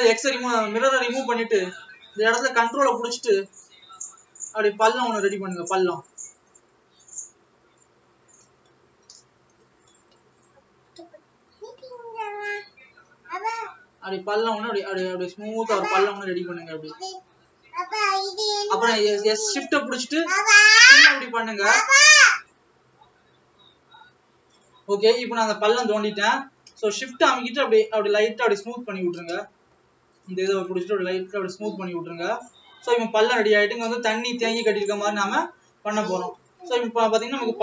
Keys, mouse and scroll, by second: 3.9 click.